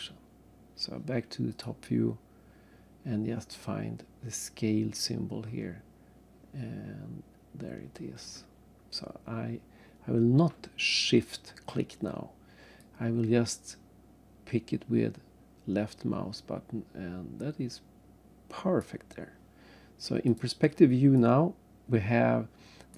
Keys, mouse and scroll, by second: 1.5 click, 6.8-7.1 scroll down 3, 7.5 scroll up 1, 12.8 click, 20.3 click, 21.2 right click.